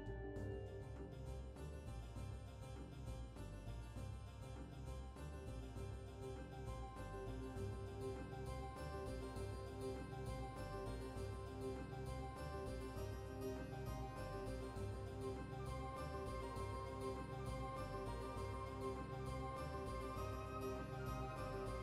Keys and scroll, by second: 5.1-5.9 typing, 7.4 typing, 9.5 typing, 14.7 typing.